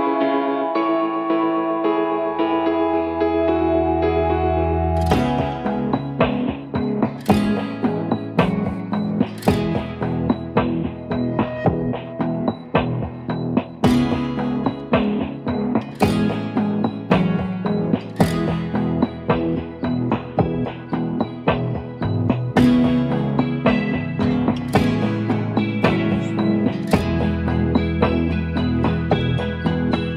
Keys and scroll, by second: 0.0 typing, 1.5-8.5 typing, 8.6 Return, 13.9-14.6 typing, 14.8 Return, 15.7-16.0 typing, 16.3 Return, 18.8 v, 20.1 ctrl+d, 20.4-20.9 Down, 22.6-23.5 typing, 23.8 Return, 27.5 ctrl+d, 28.1-28.9 typing.